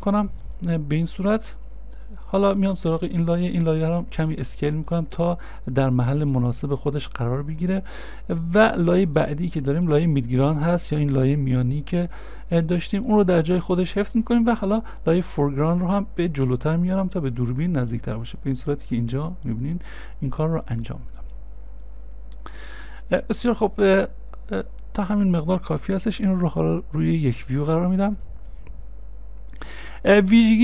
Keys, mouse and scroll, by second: 3.4 s, 8.9 s, 9.0 middle click, 19.8 middle click, 27.7-28.3 scroll up 1, 28.3 scroll up 1, 28.3 middle click.